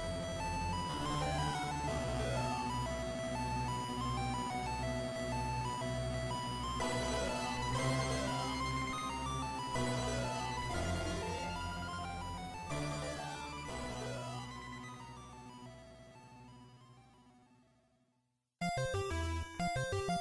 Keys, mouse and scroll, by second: 0.2 click, 0.8 Tab, 2.8 click, 4.1 click.